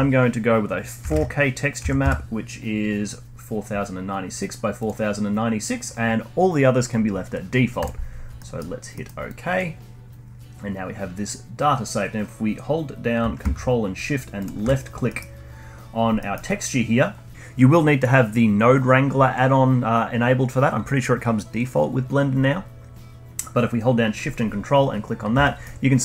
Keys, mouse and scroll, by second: 8.3 middle click, 9.3-12.4 drag, 14.5 ctrl+shift+click, 15.1-16.0 middle drag, 16.0 scroll down 1, 16.2 middle click, 16.9-17.3 scroll down 1, 25.4 middle drag, 25.9 scroll down 1.